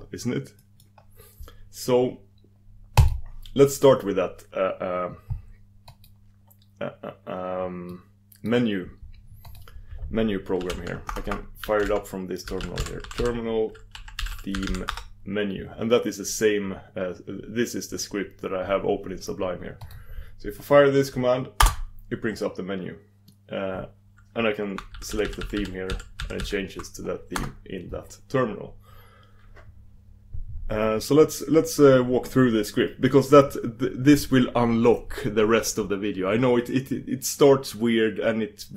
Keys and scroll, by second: 3.0 super+d, 9.6 super+d.